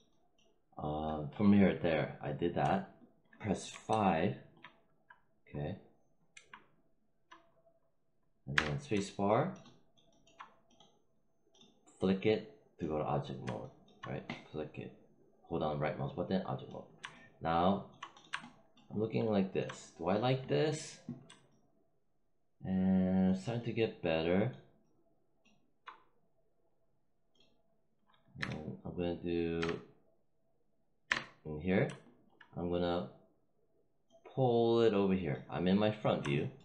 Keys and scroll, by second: 3.6 5, 8.4 space, 28.2 w, 29.5 space, 31.0 space.